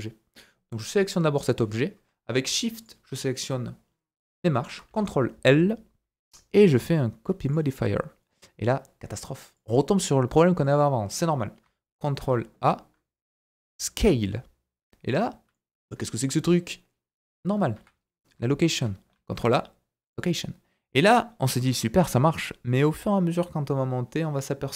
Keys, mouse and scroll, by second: 2.8 shift+click, 4.9 ctrl+l, 9.5 click, 10.5 click, 12.2 ctrl+a, 14.8-15.5 scroll down 4, 15.5 middle click, 16.8 middle click, 17.7 KP_1, 18.2-18.8 scroll up 3, 19.1 ctrl+a, 22.0-24.2 shift+middle drag, 24.2-24.7 shift+right drag.